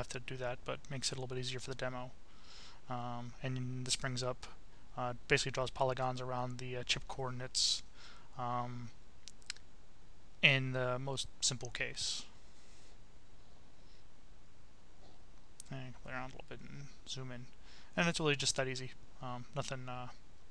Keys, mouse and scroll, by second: 3.5 click, 5.5 click, 6.5-8.7 right drag, 9.0-9.5 scroll down 1, 10.1-10.6 scroll down 1, 10.9-11.4 scroll up 1, 11.7-12.2 scroll up 1, 14.6 click, 15.7 click.